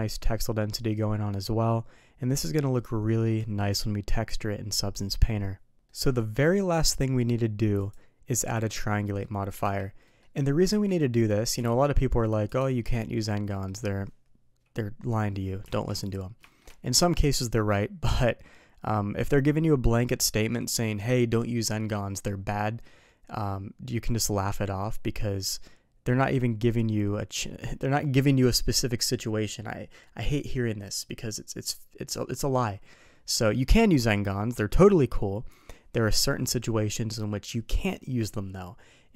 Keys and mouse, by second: 5.9 middle drag, 7.8 click, 8.5 drag, 9.0 middle click, 9.6 n, 10.1 middle click, 10.7 z, 11.1 middle click, 11.6 alt+v, 12.9 shift+middle drag, 13.5 middle click, 15.7 alt+v, 16.4 shift+middle drag, 33.5 middle click.